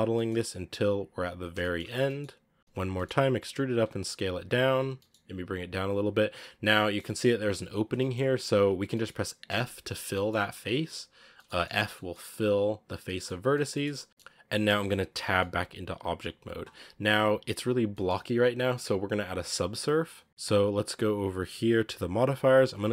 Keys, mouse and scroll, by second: 0.6 s, 1.4 shift+middle click, 1.7 scroll up 1, 1.9 middle click, 2.6 KP_1, 2.7 e, 3.5 s, 4.7 g, 6.4 middle click, 6.9-7.3 scroll up 3, 7.7 scroll down 2, 7.8 middle click, 8.1-8.6 scroll up 3, 8.6 scroll down 2, 8.8 middle click, 9.3 f, 10.0 middle click, 10.5-11.0 scroll up 3, 11.0 scroll down 5, 11.2 shift+middle click, 11.6 scroll up 2, 11.8 middle click, 12.7-13.4 scroll down 6, 12.9 middle click, 13.4 shift+middle click, 13.7 scroll up 1, 13.8 scroll down 2, 13.9 middle click, 14.3 scroll up 2, 14.4 scroll down 3, 14.6 shift+middle click, 15.1 Tab, 15.2-16.9 middle drag, 16.9-17.6 scroll up 4, 17.6 scroll down 3, 17.8 middle drag, 18.0-20.3 scroll up 3, 22.2 click.